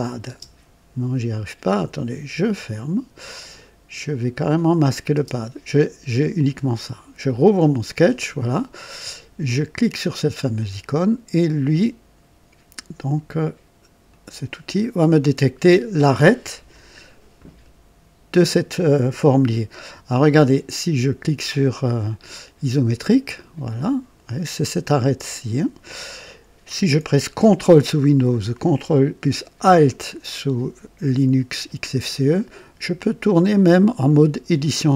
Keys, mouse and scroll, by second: 0.2 space, 1.6 click, 2.5 click, 4.3 click, 5.1 space, 7.2 click, 10.3 click, 14.0 click, 23.3 click, 31.9-34.9 ctrl+alt+drag.